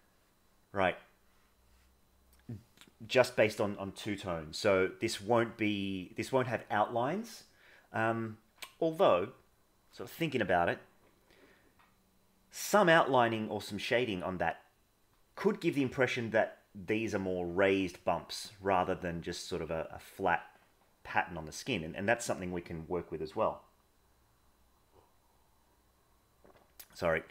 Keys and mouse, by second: 1.5 middle click.